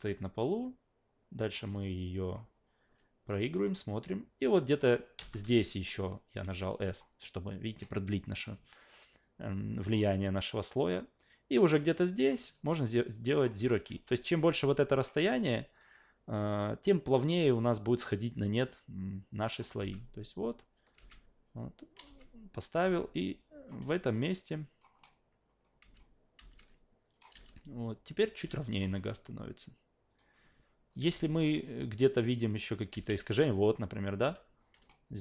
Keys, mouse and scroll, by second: 0.1-1.5 drag, 1.8-2.3 alt+drag, 3.3 click, 5.2 s, 5.4 a, 9.2-12.3 drag, 13.3 click, 13.7 alt+middle click, 13.9 a, 18.2-19.5 drag, 19.8 alt+v, 20.9 alt+v, 21.4 click, 22.0 alt+v, 22.8 alt+v, 23.3 click, 24.0 alt+click, 25.0 alt+middle click, 25.8 alt+v, 26.4 alt+v, 27.1 click, 27.3 alt+v, 28.4 alt+v, 28.7 click, 29.1-30.2 alt+drag, 30.4 alt+middle click, 31.0 alt+v, 32.9 alt+v, 34.2 a, 34.8-35.2 alt+middle drag.